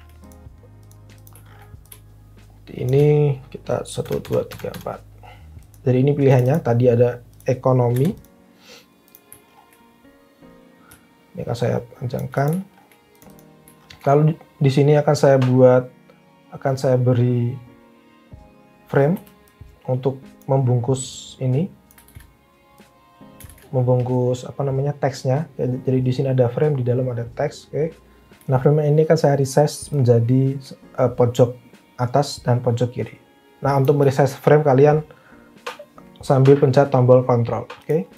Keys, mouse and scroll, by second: 3.9 Down, 4.2 Down, 4.5 Down, 4.7 Down, 7.9 Delete, 19.2 f, 22.1 ctrl+z, 23.4 ctrl+z.